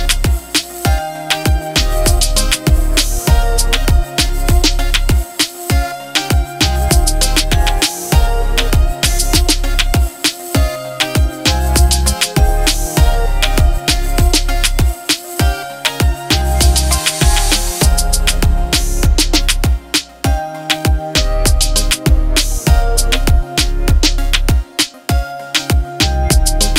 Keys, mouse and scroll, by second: 0.9 l, 2.0 shift+l, 4.0 shift+l, 4.8 l, 6.3-9.5 drag, 12.5 ctrl+t, 14.3-15.8 alt+click, 21.2 click, 21.4-22.3 alt+click, 22.0 alt+click, 24.5 click.